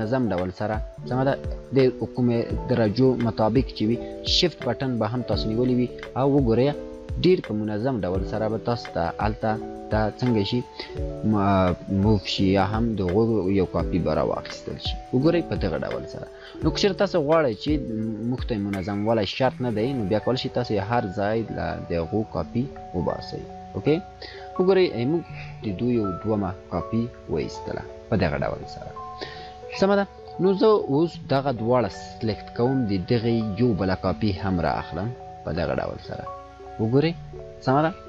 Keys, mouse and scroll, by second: 26.2 click, 28.9 scroll down 1, 30.5-31.4 click, 33.5-36.0 alt+drag, 37.0-37.9 scroll up 2.